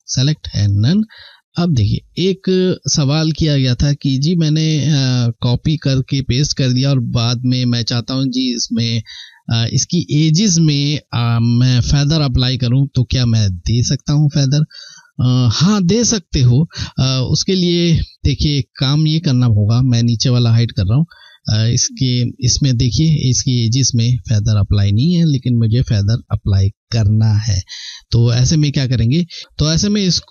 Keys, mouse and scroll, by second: 18.2 click, 20.6 ctrl+scroll up 1, 22.1 scroll up 2, 23.4 ctrl+scroll down 1.